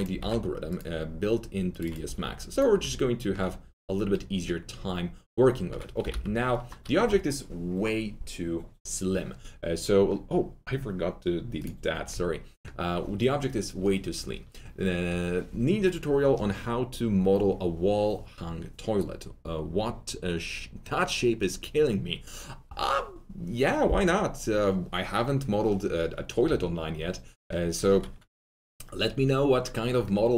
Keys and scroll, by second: 0.1 alt+2, 2.0 alt+2, 6.0 alt+t, 6.0 z, 12.0 alt+2.